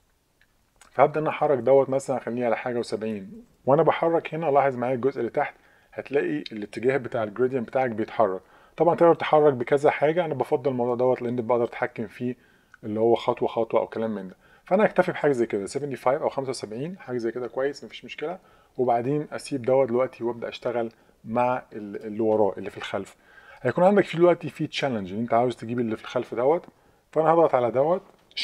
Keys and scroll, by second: 0.6 Down, 1.0 Page_Down, 1.3 Page_Down, 1.6 Page_Up, 1.8 Up, 2.0 Up, 2.6 Up, 2.7 Up, 3.4 Up, 7.5 Up, 7.7 Up, 7.9 Up, 8.0 Up, 8.4 Down, 8.9 Down, 9.0 Down, 9.1 Down, 9.9 Up, 10.4 Up, 10.9 Up, 11.2 Up, 14.3 Page_Down, 14.4 Page_Down.